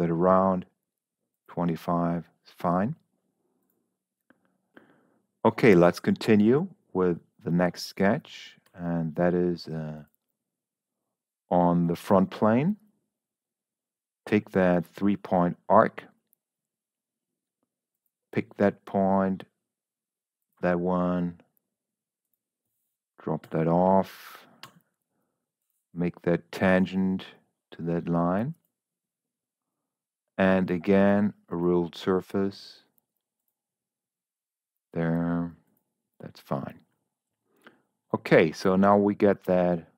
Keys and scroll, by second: 9.0 s, 23.9 Escape, 24.5 t.